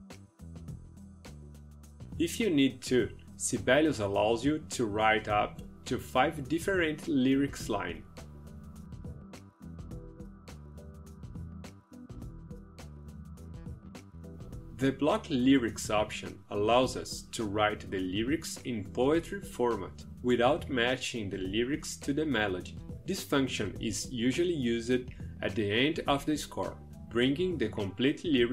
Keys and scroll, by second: 28.1 ctrl+v.